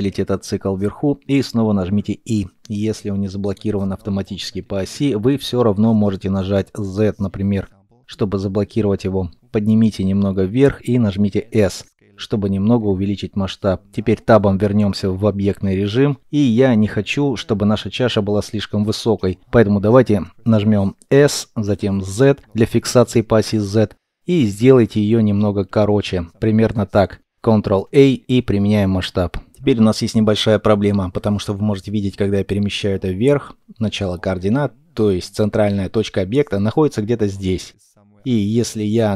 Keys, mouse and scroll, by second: 0.5 alt+l, 0.5 alt+click, 1.9 middle click, 7.0 z, 11.2 s, 13.3 middle click, 15.6 KP_1, 20.5 s, 21.5 z, 27.6 ctrl+a, 28.5 middle click, 29.0 scroll down 1, 29.7 shift+middle click, 33.7 shift+middle click, 37.1 middle click.